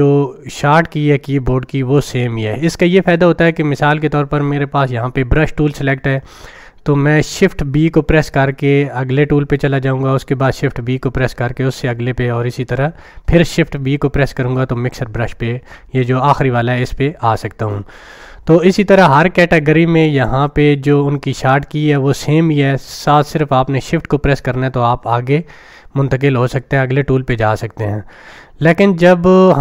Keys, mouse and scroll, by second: 0.0 click.